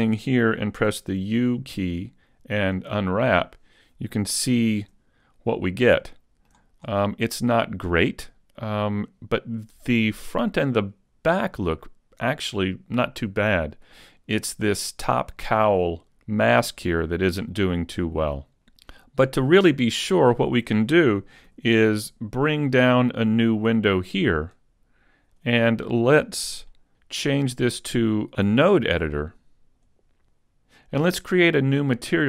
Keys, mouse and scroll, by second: 0.9 u, 11.7-12.1 scroll down 6, 21.8 n.